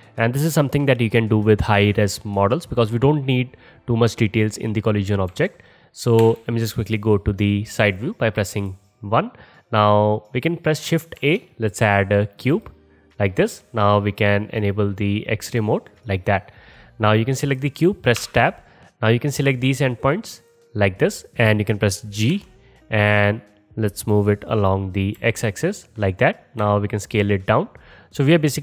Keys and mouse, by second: 5.3 KP_3, 6.2 KP_1, 8.6 click, 8.7-16.2 middle drag, 11.2 shift+a, 16.2 click, 16.3-19.0 middle drag, 18.2 Tab, 19.0-20.2 drag, 20.2 middle click, 20.6-26.3 drag, 22.4 g, 26.3-28.6 middle drag, 26.7 s.